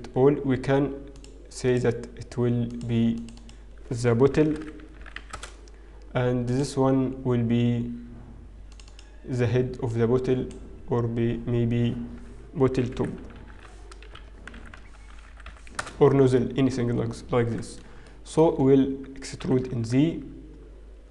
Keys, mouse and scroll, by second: 0.4-0.9 scroll up 2, 0.4 a, 1.2 click, 2.1 click, 3.2 click, 4.6 click, 5.0 t, 6.8 click, 8.8 click, 9.2 click, 14.7 shift+t, 18.6 shift+middle click, 19.3-19.9 scroll up 2.